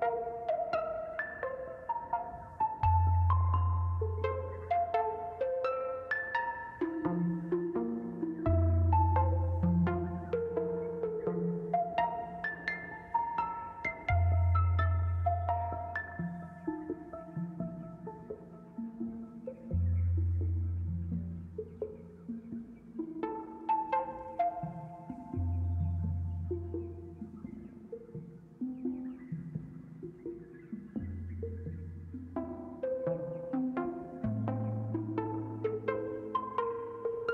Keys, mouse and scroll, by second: 3.1-3.5 scroll down 3, 3.5 middle click, 4.3-5.8 drag, 5.8-6.9 scroll up 8, 6.9-9.1 drag, 10.3 middle click, 11.0 scroll up 4, 12.2 KP_Decimal, 13.0 scroll down 4, 13.7-14.8 middle drag, 14.8 scroll down 4, 15.1-17.4 shift+middle drag, 19.1-19.7 scroll up 2, 19.7-21.8 middle drag, 23.4-25.4 drag, 27.0-28.9 middle drag, 28.5-30.8 drag, 30.1 shift+middle click, 34.6-36.5 shift+drag.